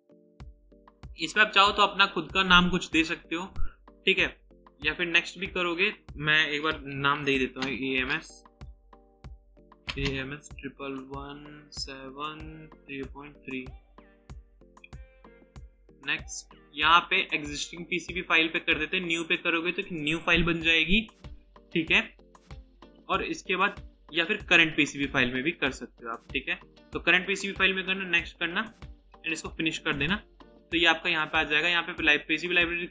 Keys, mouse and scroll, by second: 6.9-14.4 typing, 9.0 Caps_Lock, 28.3 double click, 30.4-30.9 scroll down 1, 30.9-32.0 scroll up 1.